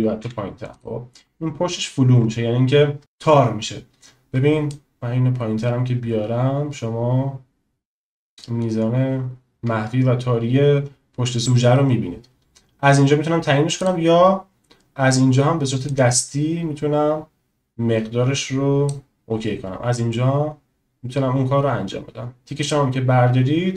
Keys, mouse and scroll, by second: 4.8-9.5 drag, 16.0-19.0 drag, 22.7 click.